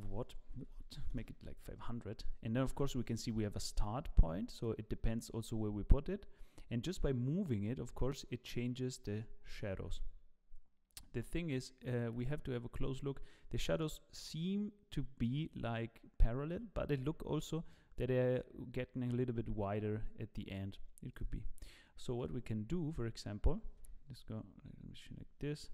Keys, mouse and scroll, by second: 0.7 click, 0.7 KP_0, 22.1 click, 22.6 ctrl+shift+space, 22.6 ctrl+shift+space, 22.7-23.1 scroll down 4, 23.9 KP_0.